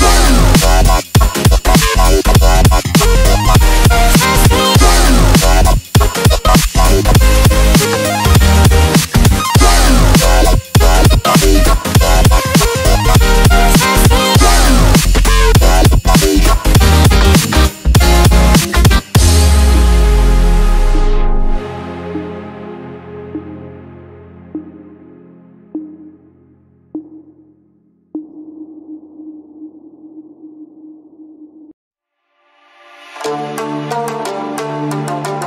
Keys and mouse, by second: 0.1-5.1 typing, 6.6-7.8 typing, 9.9-16.6 typing, 16.9 Return, 18.0 click, 21.9 ctrl+alt+shift+e, 23.9 click, 25.6 shift+click, 26.5 shift+click, 28.2 ctrl+g, 28.9-31.5 drag, 29.8-31.5 drag, 33.4-35.4 typing.